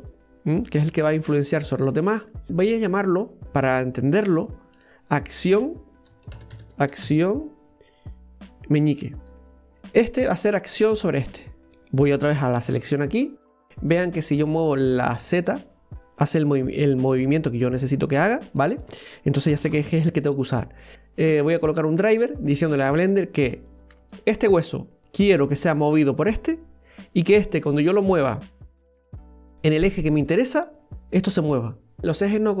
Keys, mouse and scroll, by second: 2.5 right click, 3.0-4.8 middle drag, 4.8-6.5 drag, 6.5 c, 9.6-11.7 middle drag, 12.6 right click, 13.3 right click, 13.4-15.5 middle drag, 15.5-18.5 drag, 18.8-20.9 drag.